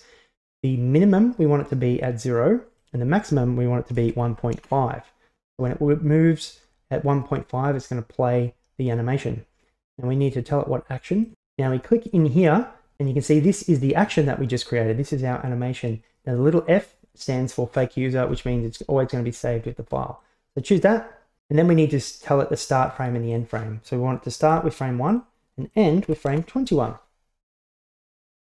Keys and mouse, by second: 3.0-5.3 drag, 12.1-20.9 drag, 23.3-25.3 drag, 26.0 click.